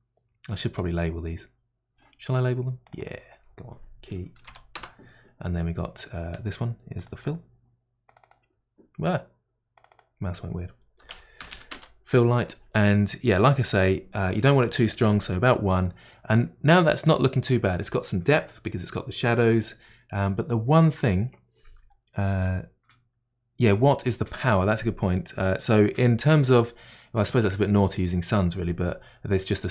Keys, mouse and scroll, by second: 2.8 click, 3.0-7.1 drag, 8.0 click, 9.7 click, 9.9-11.7 drag, 11.5 l, 13.7-16.4 drag, 16.4-29.7 middle drag.